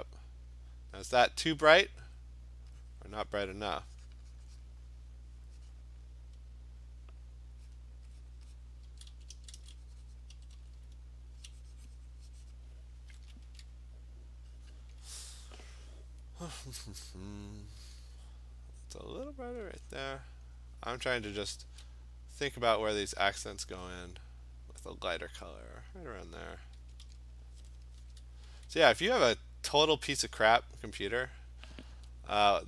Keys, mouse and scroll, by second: 2.1 ], 2.9 click, 3.6 click, 4.2 click, 4.4 click, 4.6 click, 6.0 click, 7.8 click, 8.3 click, 8.7 click, 8.9-11.5 typing, 10.2 click, 12.4 click, 12.6 click, 13.1 [, 13.5 [, 14.7 click, 16.1-16.5 scroll, 18.7 middle click, 19.3 click, 20.0 click, 21.1 [, 21.7 [, 23.2 click, 25.1 click, 25.4 click, 25.8 click, 25.9 click, 26.8-29.0 typing, 30.0 click.